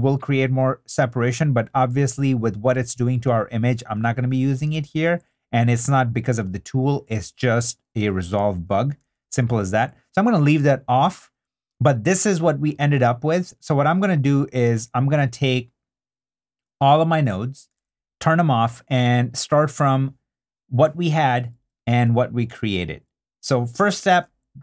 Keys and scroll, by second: 1.9 super+d, 3.7 3, 4.6 super+3, 4.7 super+d, 9.0 super+d, 17.8 super+d.